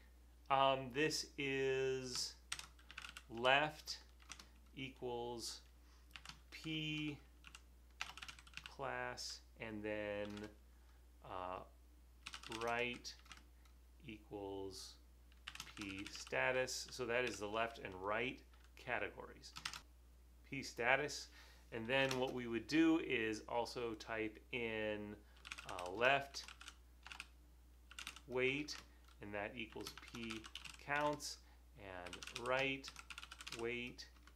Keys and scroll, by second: 2.4-4.2 typing, 6.1-9.1 typing, 10.2-13.2 typing, 15.3-17.3 typing, 20.4 super+v, 25.3-34.3 typing.